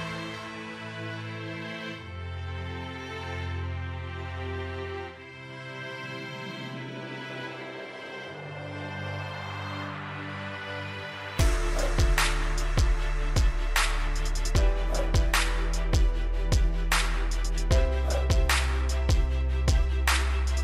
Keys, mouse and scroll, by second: 0.0 click, 1.5 right click, 2.2 click, 2.6-2.9 scroll up 1, 2.9-6.6 scroll down 1, 6.6 click, 9.6 typing, 10.1 Return, 10.8 click, 11.1 right click, 11.5 click, 12.4 click.